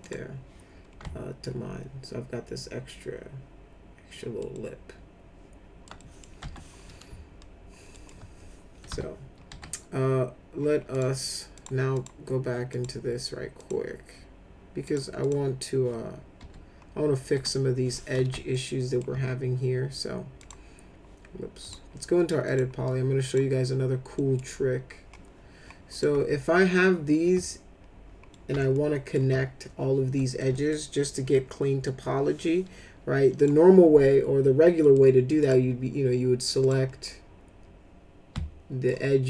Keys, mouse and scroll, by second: 0.0 click, 1.4-4.4 alt+middle drag, 4.5-5.8 alt+middle drag, 6.0 middle click, 6.4 F4, 7.9 alt+middle click, 8.9 F4, 9.5 F4, 10.9 click, 11.5 click, 11.9 click, 12.7 click, 13.6 click, 14.8 click, 15.2 click, 16.4 F4, 17.3 F4, 18.5 alt+middle click, 20.4 click, 21.6 click, 22.4 click, 23.2 click, 24.2 middle click, 25.9 click, 28.3 alt+middle click, 28.7 alt+middle click, 30.2 alt+middle click, 30.5 middle click, 33.4 click, 34.8 middle click, 35.4 click, 36.6 click, 38.3 alt+middle click.